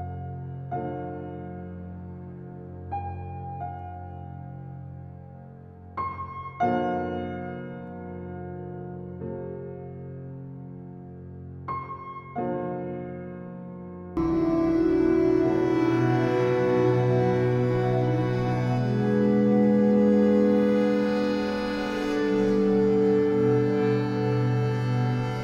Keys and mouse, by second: 3.3 click, 3.8 click, 4.3 click, 4.7 click, 5.2-7.1 drag, 8.6 alt+click, 9.1 click, 9.6 click, 11.1-15.1 drag, 15.3 click, 16.1 click, 17.4-18.0 typing, 18.1 Return, 19.3-20.0 typing, 21.3-22.9 drag, 21.9 typing, 23.5-23.9 typing.